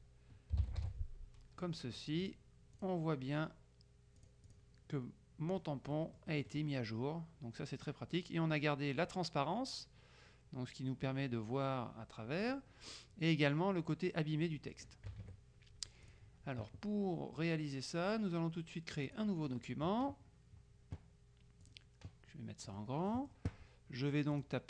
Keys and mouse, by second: 0.0-0.9 typing, 2.3 click, 4.3 click, 6.1-7.2 drag, 12.5 click, 15.2 KP_Subtract, 16.1 click, 19.1 click, 21.7 click, 22.7 middle click, 24.4 click.